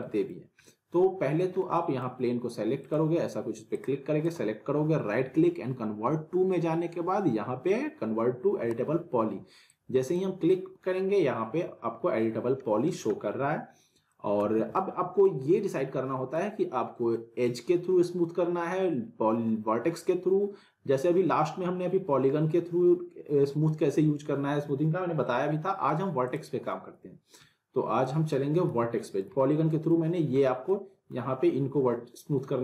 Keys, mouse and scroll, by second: 0.6-1.5 alt+middle click, 2.8 click, 4.2 right click, 9.7-10.3 drag, 14.1 middle click, 14.4 z, 14.7-15.3 alt+middle click, 15.4 scroll down 1, 16.1 alt+middle drag, 26.2 click, 28.0 middle click, 28.7 z, 29.1 scroll down 1, 29.4-30.0 alt+middle drag.